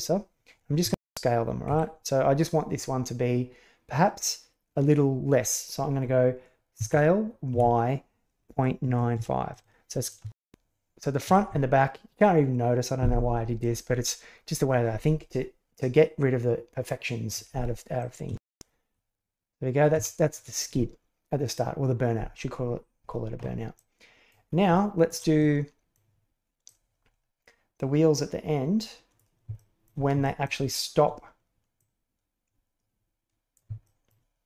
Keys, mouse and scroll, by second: 0.8 shift+space, 1.7 Escape, 6.7 s, 10.0 click, 10.2 shift+space, 11.3 Escape, 18.0 click, 18.3 shift+space, 19.9 Escape, 23.7-24.3 drag, 24.6-25.0 shift+middle drag, 25.3 middle click, 26.6-29.1 drag, 29.5-29.8 shift+middle drag, 30.1 shift+middle drag, 31.7-33.5 drag, 33.7 shift+middle drag.